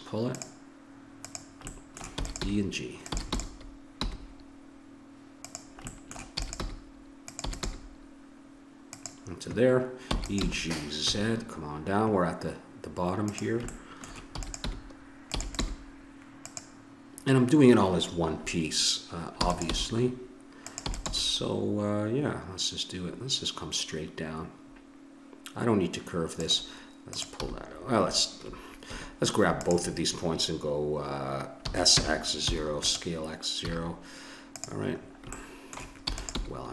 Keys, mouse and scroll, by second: 1.7 click, 1.7 middle click, 1.9 click, 2.0 middle click, 2.1 click, 2.1 e, 2.2 click, 2.4 g, 3.1 e, 4.0 g, 6.4 e, 6.6 g, 7.5 e, 7.7 g, 10.2 e, 10.4 g, 14.3 e, 14.7 g, 15.4 e, 15.8 g, 19.4 e, 19.7 g, 20.8 e, 21.1 g, 27.4-28.9 drag, 27.4 g, 30.5-31.6 drag, 31.6 s, 33.6 a, 34.5 click, 35.0-36.4 drag, 36.0 e, 36.4 g.